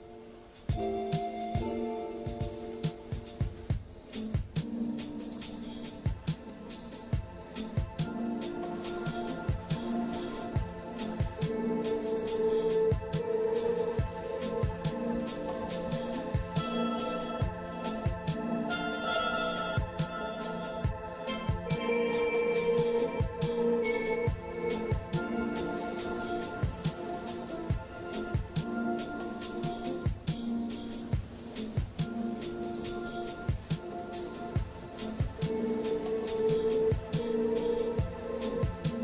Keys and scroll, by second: 5.3 ], 8.7 ctrl+z, 11.2 scroll down 1, 11.6 scroll up 1, 13.2 scroll up 1, 13.9 [, 14.7 ctrl+z, 16.8 [, 17.1 ctrl+z, 17.5-18.0 scroll down 2, 18.1 scroll up 1, 19.5 ctrl+z, 20.8 scroll down 1, 21.2-21.5 scroll up 1, 22.6 ctrl+z, 25.7 ctrl+z, 27.7 [, 28.1 ], 28.4 ctrl+z, 29.0 ctrl+z, 29.5 ctrl+z, 30.4 ctrl+z, 31.0 ctrl+z, 31.3 ctrl+z, 31.9 ctrl+z, 35.8 [, 38.1 ].